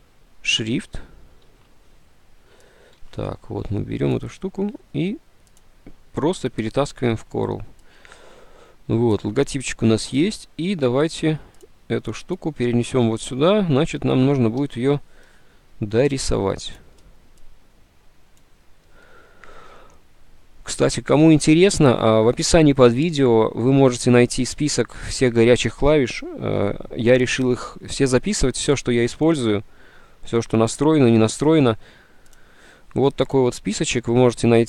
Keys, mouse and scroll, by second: 1.6 alt+Tab, 3.2 alt+Tab, 14.7 ctrl+Home.